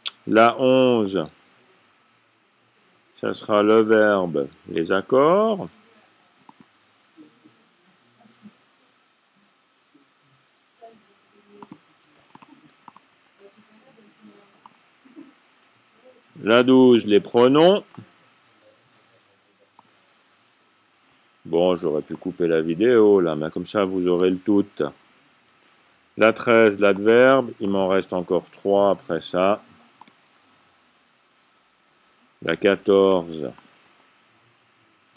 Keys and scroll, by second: 5.7 c, 7.8-8.6 typing, 9.8-10.5 typing, 13.8 a, 18.9 c, 20.1 typing, 22.6-23.3 typing, 27.9 c, 30.9-31.8 typing, 33.7-34.5 typing.